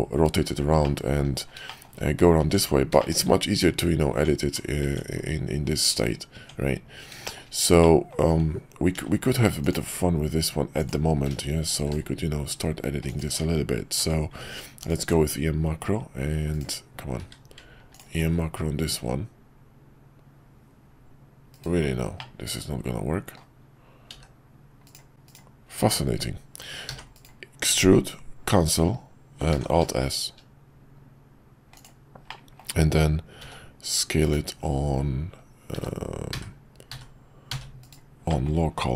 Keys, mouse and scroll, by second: 0.8-1.2 middle drag, 1.7 shift+middle click, 2.4 Tab, 2.9 shift+middle click, 7.2 shift+middle click, 7.8 middle click, 8.9 ctrl+r, 11.7 ctrl+b, 14.0 q, 17.2 q, 22.3-23.5 middle drag, 25.1 q, 29.5 alt+s, 32.4 middle click, 35.7 s, 38.2 middle click.